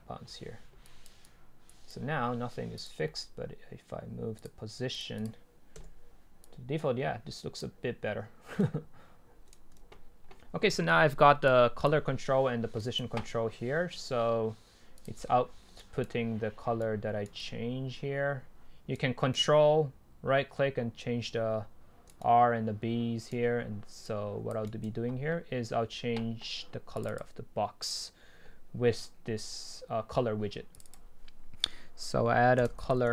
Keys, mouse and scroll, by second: 1.6-3.1 drag, 3.3-4.4 scroll up 2, 4.4-5.1 drag, 5.1 right click, 5.8 Delete, 7.3-8.6 drag, 8.6-9.9 right drag, 9.9 ctrl+z, 11.5-12.8 drag, 12.8-15.1 right drag, 15.1 click, 15.4 middle click, 15.8-16.9 right drag, 17.3 right click, 17.5 right click, 24.1 click, 24.3-24.7 drag, 24.7-26.9 right drag, 27.2-29.9 drag, 31.1 double click.